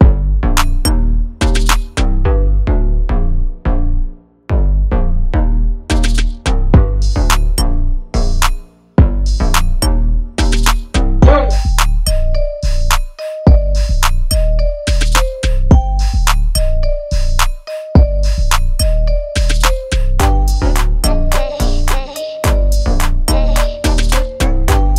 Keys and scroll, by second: 2.6 ctrl+l.